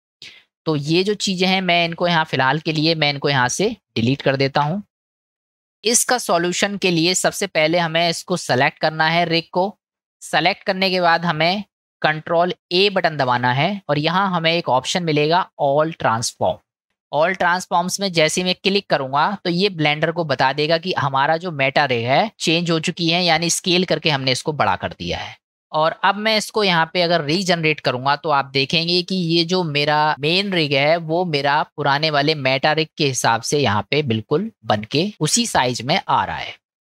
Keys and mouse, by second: 1.0-2.1 drag, 3.0 click, 3.7 click, 4.6 Delete, 5.0 click, 7.1-7.5 shift+middle drag, 13.0 ctrl+a, 20.7-21.1 middle drag, 25.4 ctrl+z, 28.9 click, 31.6-32.2 middle drag, 33.8 middle drag, 36.0-36.8 middle drag.